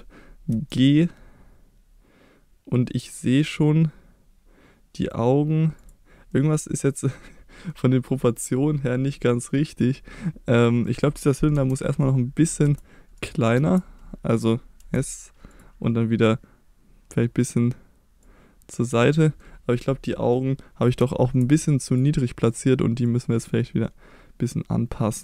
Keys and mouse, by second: 0.5 g, 5.8 click, 6.3-7.7 middle drag, 10.8 middle click, 11.5 KP_1, 12.6 s, 13.2 right click, 13.6 Tab, 14.8 s, 15.5 click, 18.3 click, 19.0 middle click, 20.1 middle click, 21.0 Tab, 21.9 click, 23.2-25.2 drag.